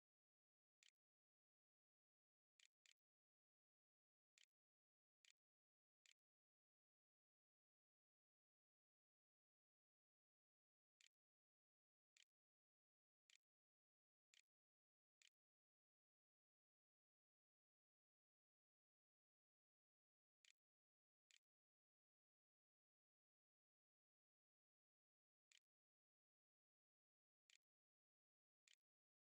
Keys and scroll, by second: 0.0-7.5 typing, 11.0-16.1 typing, 19.3-20.3 typing, 20.7 Insert, 20.8 Return, 21.7 Return, 22.5 Up, 22.6 space, 25.6-29.3 typing, 28.8 Delete.